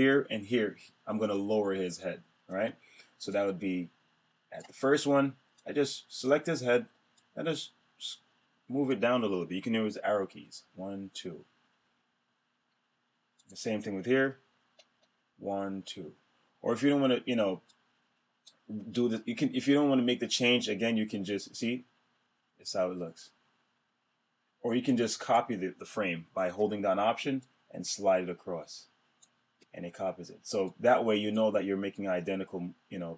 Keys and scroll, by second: 10.3 Down, 14.9 Down.